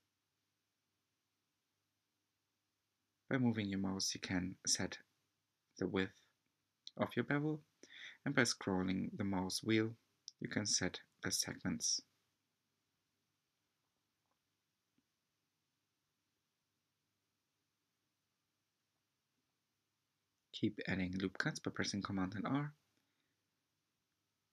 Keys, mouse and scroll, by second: 2.9-3.6 scroll down 4, 3.7 Tab, 4.4-5.1 scroll down 1, 5.1-5.7 shift+middle drag, 5.7 Tab, 6.4-8.5 shift+middle drag, 8.5 3, 9.0 click, 11.1 g, 16.6-17.5 scroll up 1, 17.6 r, 22.9-23.7 scroll up 3, 23.7-24.5 shift+middle drag.